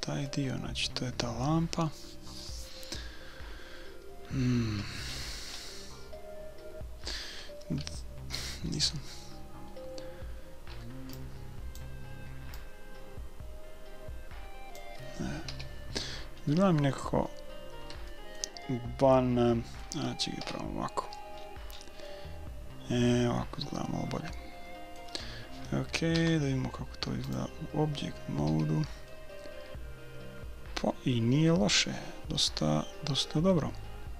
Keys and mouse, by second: 5.1-8.5 middle drag, 10.8 b, 12.5-14.6 drag, 15.5 a, 15.8 middle click, 16.5-20.4 middle drag, 20.4 KP_5, 21.4-24.0 middle drag, 26.1 Tab, 28.5 a, 29.2-31.1 middle drag.